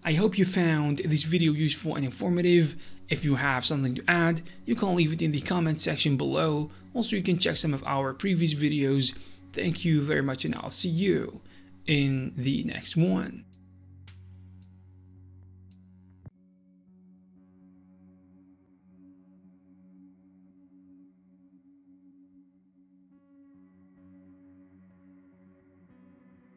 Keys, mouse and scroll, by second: 1.3 click, 2.3 click, 4.1 click, 5.5 click, 7.1 click, 8.4 click, 11.5 click, 12.9 click, 14.2 click, 14.7 middle click, 16.5 click, 17.2 click.